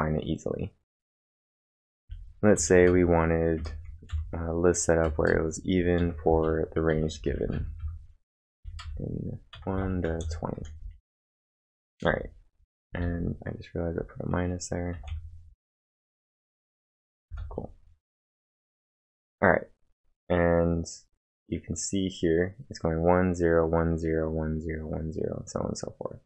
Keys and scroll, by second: 1.5 ctrl+1, 1.6-15.0 typing, 17.3 space, 18.4 ctrl+`.